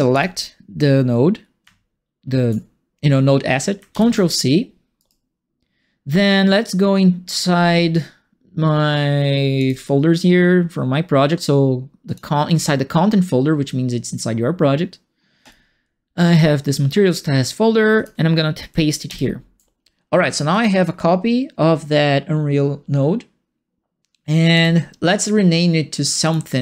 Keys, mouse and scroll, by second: 0.1 click, 3.9 ctrl+c, 4.9-6.0 right drag, 9.5 click, 12.0 click, 15.4 click, 17.9 click, 19.0 ctrl+v, 20.5 click, 24.5 click, 26.2 click.